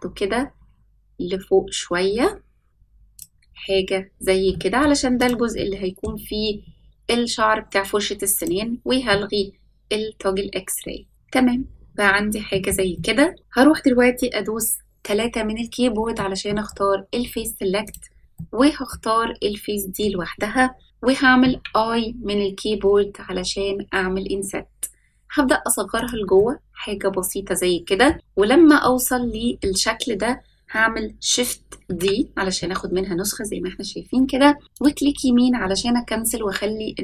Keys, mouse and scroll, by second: 3.4 scroll down 2, 4.1-4.5 scroll down 1, 4.5 middle click, 5.1 click, 5.5 middle click, 8.3 click, 9.0-11.1 middle drag, 11.3-11.6 scroll up 2, 12.4 shift+middle click, 12.4 scroll up 1, 12.9 middle click, 15.0 3, 16.1 middle click, 17.8 click, 18.3 middle click, 19.1-20.8 scroll up 1, 21.4 i, 26.3-28.0 middle drag, 28.8 middle click, 30.0-31.0 scroll up 1, 31.8 shift+d.